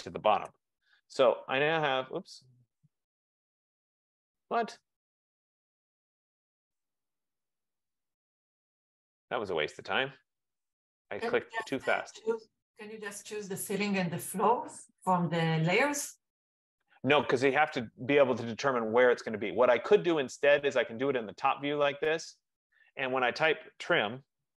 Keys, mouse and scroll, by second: 0.6 Return, 2.5 click, 3.8 click, 5.4 click, 6.6 click, 9.5 shift+click, 10.7 click, 11.9 click, 13.4 shift+click, 15.1 shift+click, 16.7 click, 19.6 click, 20.0 click, 24.1-24.5 typing.